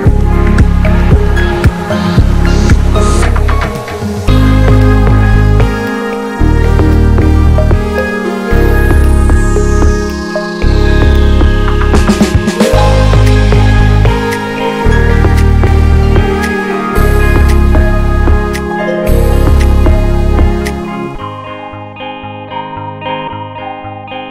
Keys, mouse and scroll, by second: 1.6 s, 2.5 click, 3.4 click, 3.8 Tab, 4.1 ctrl+s, 4.3 Tab, 4.9-6.6 drag, 6.6 ctrl+z, 6.9 ctrl+s, 7.3 middle click, 7.6 Tab, 7.8 click, 7.9 ctrl+a, 9.7 click, 10.0 Tab, 10.3 a, 10.6 click, 10.8 l, 11.3 p, 11.7 Tab, 11.8 click, 12.2 ctrl+a, 12.4 Tab, 12.7 shift+middle click, 13.6 e, 15.9-17.0 middle drag, 17.0 ctrl+r, 17.4 Tab, 17.6 middle click, 17.8 Tab, 18.3 alt+z, 18.5 click, 19.1 shift+middle click, 19.4-20.0 scroll up 1, 20.0 ctrl+r, 21.4 alt+z, 21.6 alt+z, 21.7 click, 22.8 s, 24.2 shift+middle click.